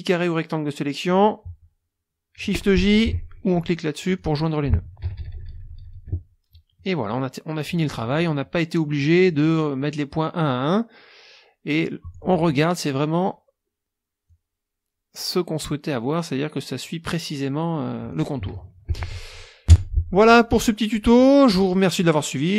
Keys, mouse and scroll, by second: 4.0 click, 5.0 KP_Subtract, 6.8 click, 7.7 click, 9.0 click, 9.1 scroll down 2, 9.1 click, 10.1 click, 14.3-18.3 drag, 18.9 ctrl+shift+z, 19.7 KP_5, 20.6 click, 22.3 click.